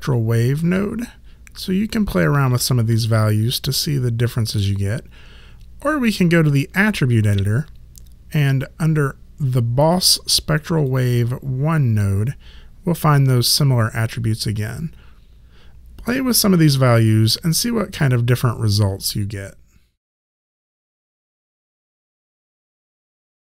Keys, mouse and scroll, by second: 6.9 click, 9.9 click.